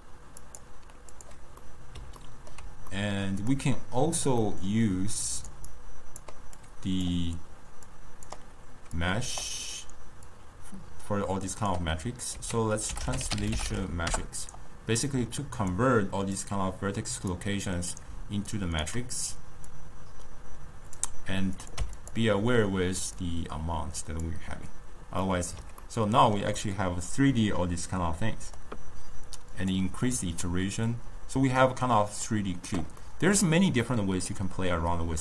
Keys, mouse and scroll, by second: 0.3 click, 1.7-3.6 middle drag, 3.6 click, 4.5-5.4 middle drag, 5.4 click, 5.8 click, 7.9 click, 9.0 click, 10.4 click, 12.4 ctrl+a, 16.4 drag, 18.6 shift+right click, 19.8 drag, 21.7 click, 23.2-25.3 drag, 25.3-29.6 middle drag, 29.6 click, 30.5-35.2 middle drag.